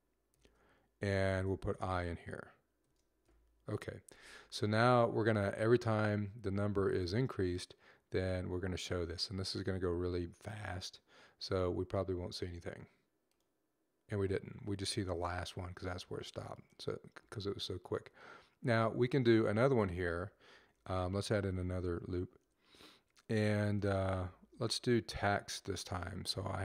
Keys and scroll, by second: 0.0-0.1 typing, 1.4 typing, 2.7-3.1 typing, 23.2-24.4 typing.